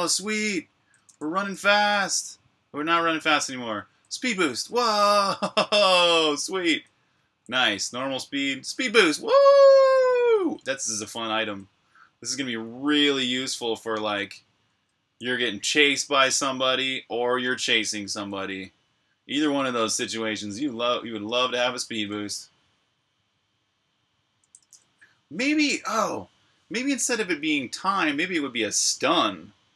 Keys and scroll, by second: 0.0-5.8 typing, 6.9 typing, 8.6 typing, 11.2-13.0 typing, 14.3-18.1 typing, 19.1-19.9 typing, 21.0-21.6 typing, 23.5 typing, 24.4 super+q.